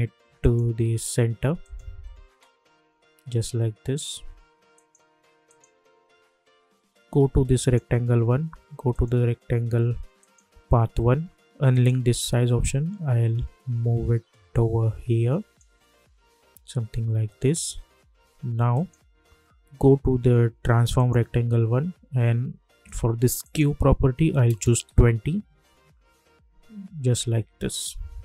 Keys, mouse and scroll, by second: 4.7-17.9 drag, 18.7 click, 20.9 click, 23.4 click, 24.9 Return, 27.7 click.